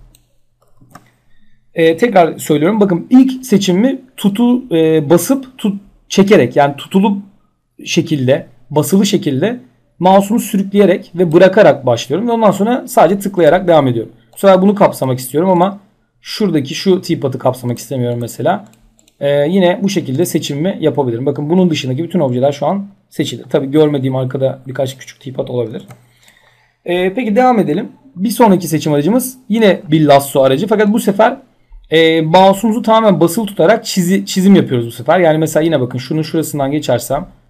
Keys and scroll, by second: 0.3 ctrl+z, 25.3 ctrl+z.